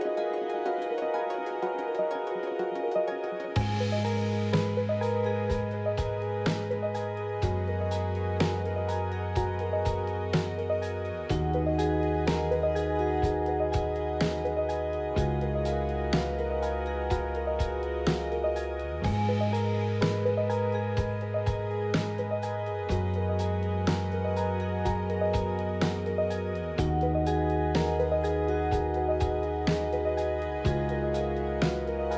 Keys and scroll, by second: 7.4 ctrl+r, 30.4 ctrl+z.